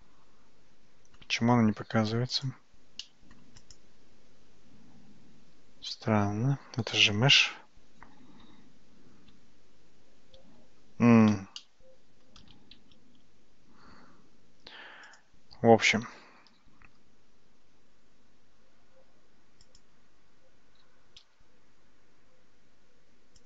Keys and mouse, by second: 2.4 click, 3.0 middle click, 8.8 `, 11.6 shift+middle click, 13.0 shift+z, 15.2 click, 16.9 g, 20.8 f, 21.2 g.